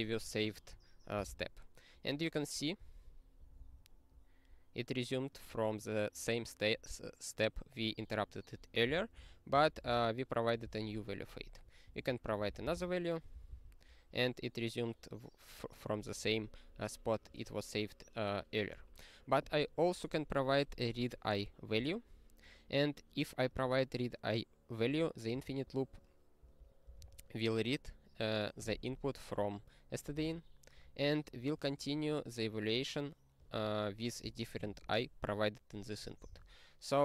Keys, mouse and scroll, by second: 1.4 ctrl+e, 3.6 ctrl+b, 5.3 click, 5.4 click, 5.5 click, 5.7 click, 8.8 ctrl+g, 9.1 ctrl+n, 9.5 ctrl+p, 9.7 ctrl+space, 9.8 ctrl+e, 10.6 ctrl+g, 11.5 click, 11.9 ctrl+p, 12.2 ctrl+p, 12.4 ctrl+e, 13.4 ctrl+b, 16.0 click, 16.2 click, 17.2 click, 17.3 click, 18.7 click, 23.5 double click, 23.5 double click, 23.6 click, 23.7 click, 24.9 click, 25.4 ctrl+a, 26.4 ctrl+n, 26.8 ctrl+space, 27.0 ctrl+e, 30.1 ctrl+g, 33.4 click.